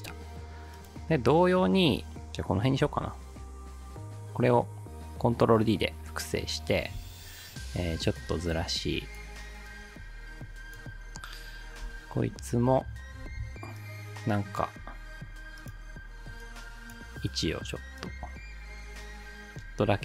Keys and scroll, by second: 2.9 ctrl+d, 7.0 p, 11.9 u, 13.2 p.